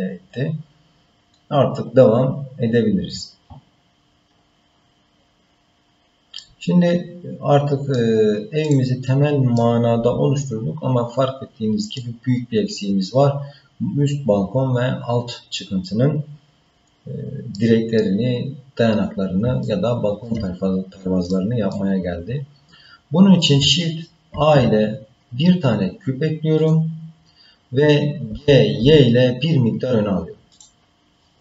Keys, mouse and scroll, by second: 6.4-8.0 middle drag, 8.6 click, 9.0 scroll down 2, 9.6-12.0 middle drag, 12.7-13.0 scroll up 1, 17.6 middle click, 18.5-19.4 scroll down 1, 19.6 shift+middle click, 20.7-21.3 scroll up 1, 21.3 middle click, 22.0-22.6 scroll down 1, 24.3 shift+a, 28.3 g.